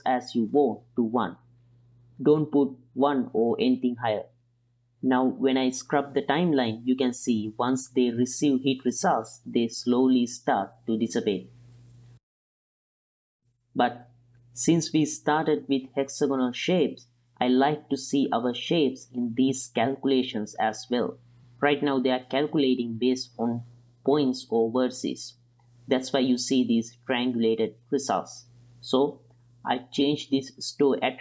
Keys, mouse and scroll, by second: 2.9 click, 4.6-9.3 drag, 9.7-10.8 middle drag, 11.2 click, 23.4 space, 24.2-26.2 middle drag, 28.4-29.6 drag.